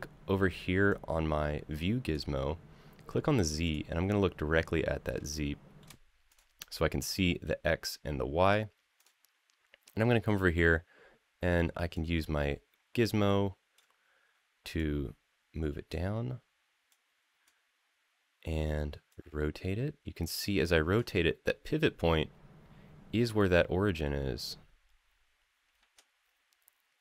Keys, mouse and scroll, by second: 0.7-1.9 drag, 3.4 click, 5.1-5.6 shift+middle drag, 6.1 click, 8.7 click, 11.7-13.5 drag, 14.5-15.7 drag, 16.7-17.2 drag, 18.9-20.7 drag, 23.2-23.8 middle drag, 25.5 middle click.